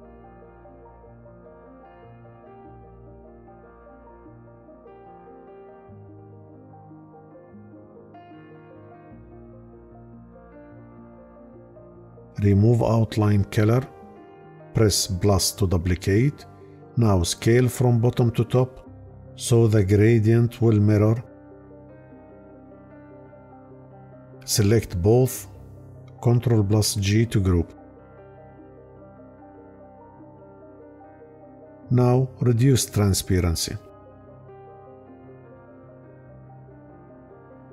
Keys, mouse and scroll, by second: 26.2 ctrl+g.